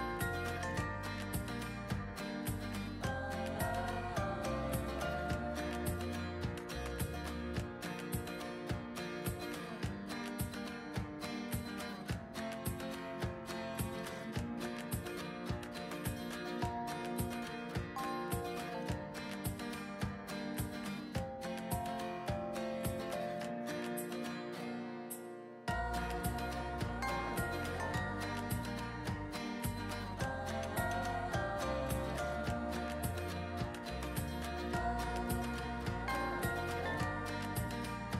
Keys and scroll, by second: 12.7 ctrl+z, 24.5-25.9 typing, 26.2 ctrl+z.